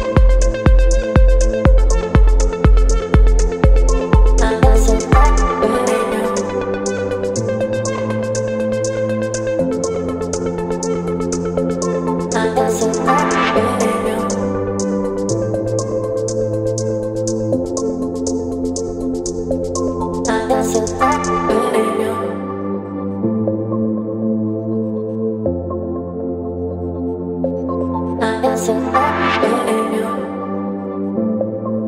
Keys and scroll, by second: 0.5 [, 0.6 [, 2.5 x, 5.1 v, 9.6 space, 19.5 space, 20.2 ctrl+t, 23.5 Return, 25.0 Down, 27.3 space.